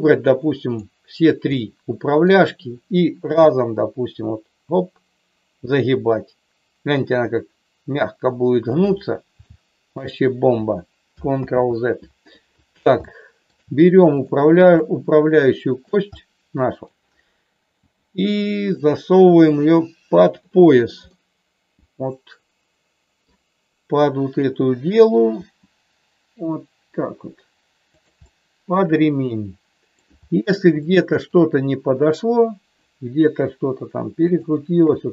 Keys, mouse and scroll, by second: 1.5 middle click, 3.3 g, 9.4 shift+middle click, 11.4 ctrl+z, 13.0 shift+middle click, 15.6 middle click, 16.0 middle click, 17.8 g, 21.1-23.3 middle drag, 25.4 g, 28.1-30.0 middle drag, 30.7 shift+middle click, 33.4 r, 34.7 KP_7.